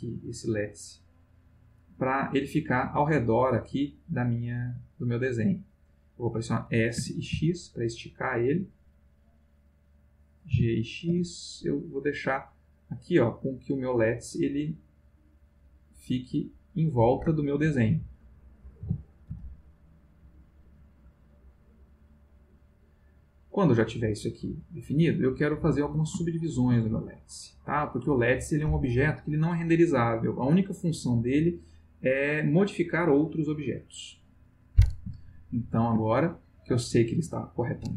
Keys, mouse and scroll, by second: 1.2 click, 2.3-5.6 middle drag, 7.0 s, 7.3 x, 9.2 click, 10.5 g, 11.1 x, 11.9 click, 13.4-15.5 middle drag, 16.2 click, 17.4 ctrl+middle click, 18.8 g, 19.3 x, 20.6 click, 21.4-25.6 middle drag, 26.2 shift+middle click, 32.9 click, 35.2-35.9 shift+middle drag, 36.0-36.9 ctrl+shift+middle drag.